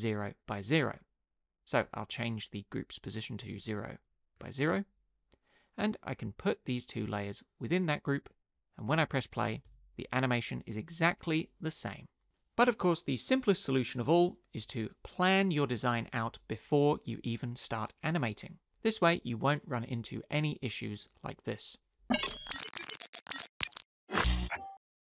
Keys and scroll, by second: 3.6 0, 4.6 Return, 4.6 0, 8.9 Tab, 9.7 space.